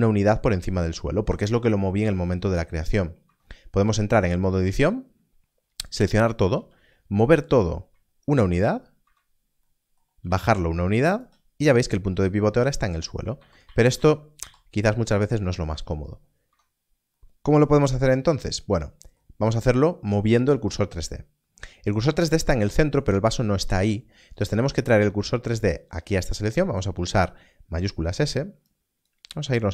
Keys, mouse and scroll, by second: 3.2 Tab, 4.6 a, 6.7 z, 8.5 ctrl+click, 9.0 Tab, 10.1 g, 10.2 z, 11.1 ctrl+click, 13.3 ctrl+z, 13.6 ctrl+z, 14.3 ctrl+z, 26.4 Tab, 28.6 click, 29.4 ctrl+space.